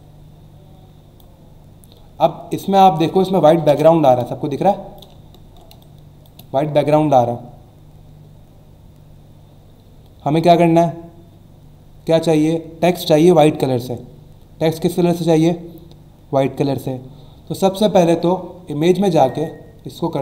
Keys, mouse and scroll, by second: 2.6 alt+shift+click, 3.7 Return, 4.1 click, 5.2 alt+scroll up 1, 5.7 space, 5.8 click, 6.2 space, 19.1 click.